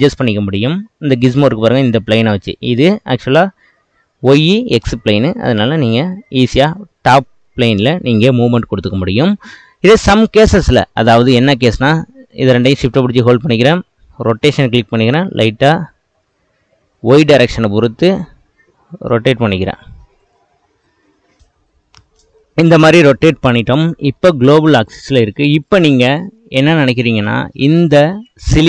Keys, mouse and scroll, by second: 0.4-0.8 scroll up 3, 0.8-4.4 middle drag, 5.4 click, 6.8-8.5 middle drag, 8.5-9.2 scroll down 3, 9.5-11.4 shift+middle drag, 11.4 click, 11.8 drag, 12.4 shift+click, 14.5 r, 24.2-24.8 middle drag, 24.8 click, 25.7 click, 26.1-28.6 middle drag.